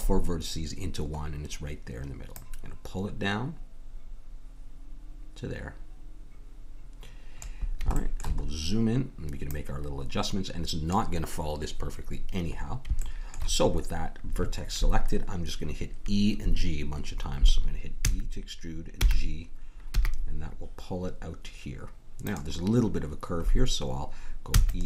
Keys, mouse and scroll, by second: 1.2-2.3 middle drag, 2.3-4.3 drag, 8.4 middle click, 9.5-11.3 drag, 13.0-16.0 middle drag, 18.0 e, 24.5 e.